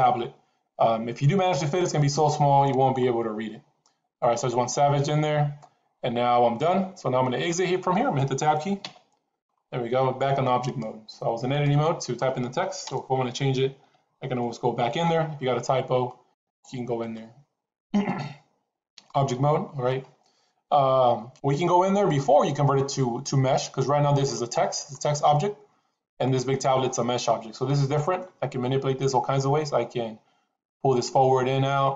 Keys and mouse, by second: 8.7 Tab, 10.6-11.6 drag, 12.8 BackSpace, 14.2 e, 16.3 click, 16.9-19.1 drag, 26.0 click, 26.8-28.1 middle drag.